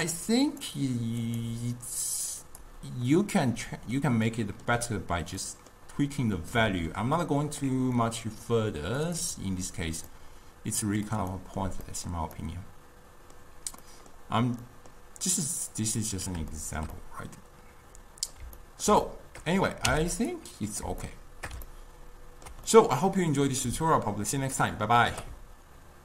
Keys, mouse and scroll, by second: 0.6 click, 1.3-3.6 drag, 3.6-9.1 middle drag, 9.1-10.2 drag, 10.2-15.8 middle drag, 15.8 click, 16.6-20.0 shift+middle drag, 20.0 x, 20.8 click, 21.1-22.7 shift+middle drag, 22.7-23.3 scroll up 2, 23.3-26.0 middle drag.